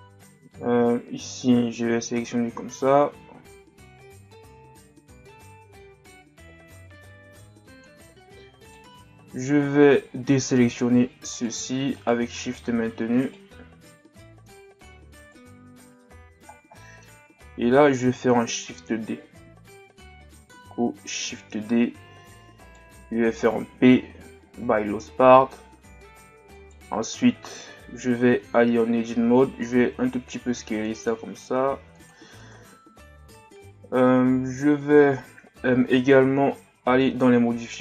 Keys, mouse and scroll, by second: 9.1-9.7 scroll up 3, 10.6-11.3 scroll up 2, 11.3 shift+right click, 12.0 shift+right click, 12.5 shift+right click, 13.2 shift+right click, 13.9 z, 14.2-15.2 middle drag, 15.2 shift+right click, 16.1-16.5 scroll down 3, 16.8 middle click, 17.4-18.1 scroll down 1, 18.6-20.0 scroll up 1, 21.6 shift+d, 26.6 right click, 28.4 Tab.